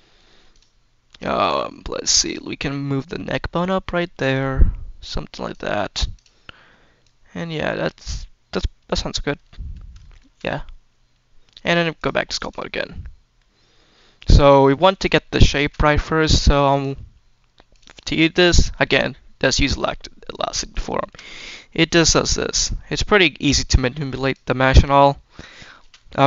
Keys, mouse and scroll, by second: 0.4 click, 2.2 click, 2.7 click, 2.9 middle click, 3.3-5.4 drag, 6.0 click, 6.9 click, 7.0-8.8 drag, 9.1-9.8 scroll down 2, 9.9 shift+middle drag, 11.5-11.9 drag, 12.3 click, 12.6-13.2 middle drag, 13.2 scroll down 1, 14.3 click, 14.5-14.8 shift+middle drag, 14.9 scroll up 2, 15.3 shift+middle drag, 16.6-17.7 drag, 18.4 shift+middle click, 19.5 click, 20.9 shift+middle click, 20.9 shift+click, 21.4-22.0 scroll up 2, 22.0 click, 24.6 click, 25.4 shift+middle click.